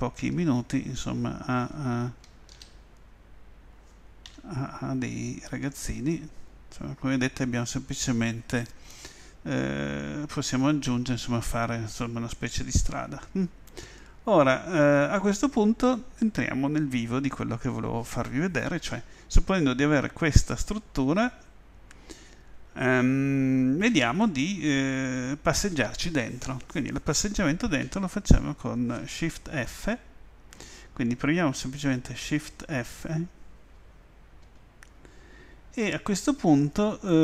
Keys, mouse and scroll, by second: 2.5 shift+d, 5.7 click, 12.3-14.0 right drag, 14.0-16.0 middle drag, 19.1-22.3 middle drag, 22.5 middle click, 34.4 shift+f.